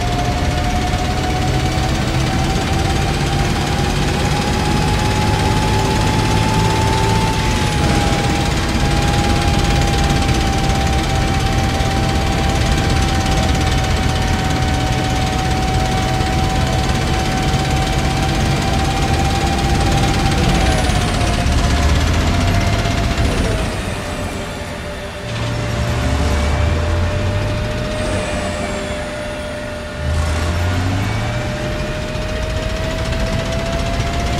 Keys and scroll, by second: 5.7 w, 7.1 e, 19.4 a, 21.2 w, 23.1 s, 25.1 w, 27.7 s, 29.8 w, 32.6 a.